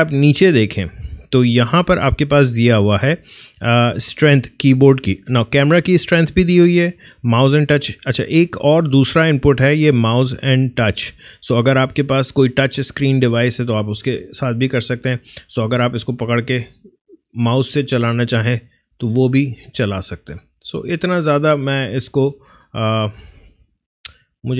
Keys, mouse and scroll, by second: 16.1-20.7 drag, 20.7-24.5 drag.